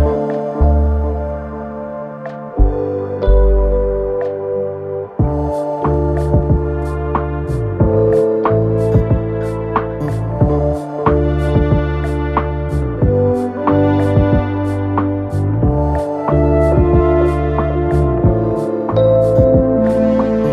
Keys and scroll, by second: 0.2 4, 13.3 ctrl+z, 16.2 ,, 17.4 ctrl+z.